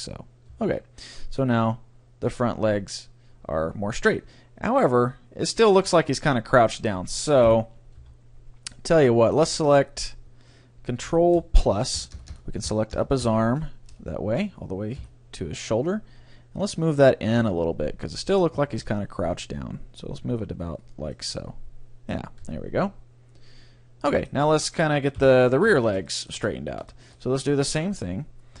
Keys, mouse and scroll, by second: 0.1-2.9 middle drag, 0.7 Tab, 6.7-10.3 middle drag, 7.5 KP_3, 8.1 Tab, 11.6-12.3 ctrl+KP_Add, 12.7 ctrl+KP_Add, 12.9 ctrl+KP_Add, 13.2 ctrl+KP_Add, 13.9 ctrl+KP_Add, 15.0 KP_1, 16.2 g, 21.2-22.7 drag, 21.2-24.6 middle drag, 22.5 Tab, 25.2 KP_3, 25.7 Tab, 26.1-28.6 middle drag.